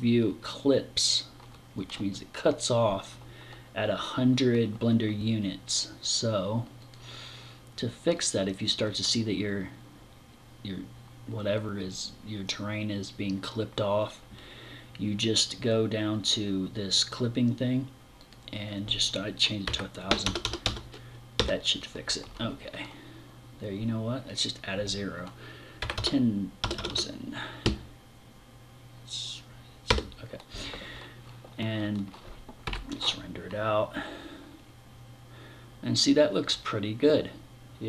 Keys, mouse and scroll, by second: 6.2 click, 7.6 click, 17.6 click, 23.8 click.